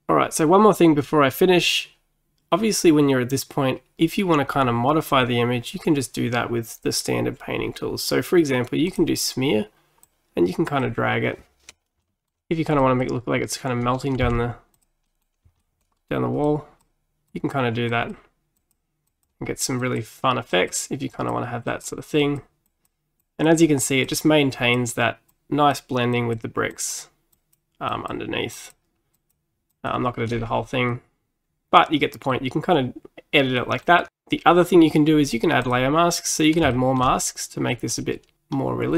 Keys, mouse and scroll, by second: 8.9-12.1 drag, 12.1 shift+middle click, 12.9-14.3 drag, 14.3 f, 15.1 middle click, 15.9-16.5 scroll up 2, 16.5-30.4 drag, 30.4-30.9 scroll down 4, 30.9-34.1 middle drag, 35.7 click, 36.8 shift+middle click, 37.2 middle click, 37.3-37.8 scroll up 2.